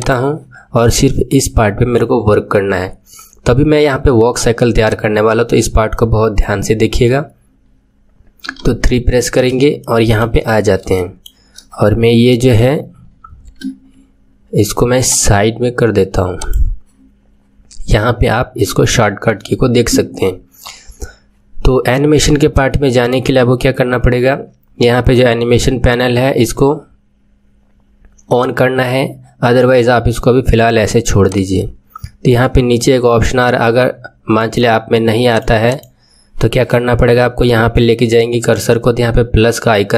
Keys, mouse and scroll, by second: 0.8-3.8 middle drag, 4.8-9.0 drag, 9.0-10.9 scroll up 2, 10.9-13.5 scroll up 1, 13.5-14.0 scroll up 1, 14.0-14.9 scroll up 1, 14.9-16.5 scroll up 1, 16.5-17.9 scroll up 1, 17.9-18.9 scroll up 1, 22.5-34.2 drag, 34.3-39.9 right drag.